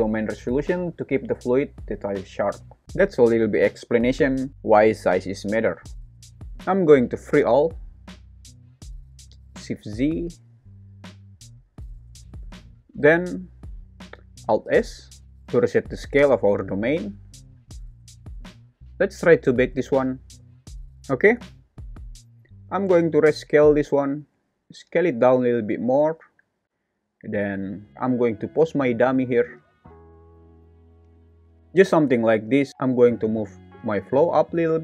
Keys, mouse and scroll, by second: 2.9 space, 7.6 click, 9.2 shift+z, 15.2 alt+s, 23.6 s, 27.0 click, 27.9 Escape, 27.9 r, 29.1 r, 30.2-31.3 typing, 30.8 Escape, 32.3 click, 32.7 Escape, 32.7 g, 32.7 z, 33.1 g, 34.1 z.